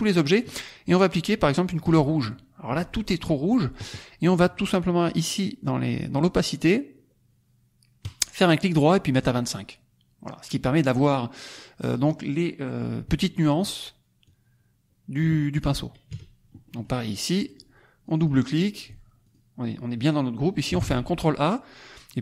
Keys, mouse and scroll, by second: 1.9 click, 7.1-7.9 scroll down 1, 7.9 right click, 9.2 click, 11.1-12.2 middle drag, 11.1-12.2 scroll up 1, 14.2-15.3 drag, 15.6 click, 16.1 KP_Subtract, 16.6 middle click, 17.4 click, 18.0 click, 19.2 ctrl+click, 21.1 ctrl+a.